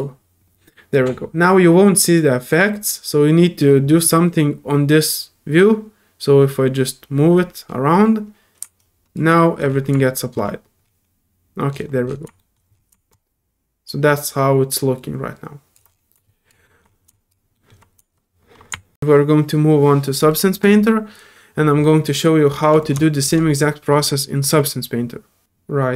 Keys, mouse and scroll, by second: 9.0-10.4 drag, 10.4 scroll down 2, 11.1-11.7 scroll down 2, 11.7 middle click, 13.5-15.8 drag, 18.9 ctrl+p, 22.8-23.2 drag.